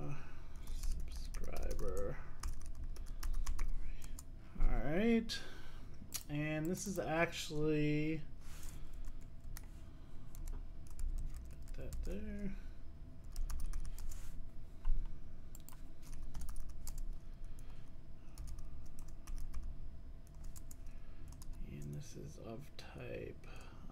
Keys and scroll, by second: 14.1 Return.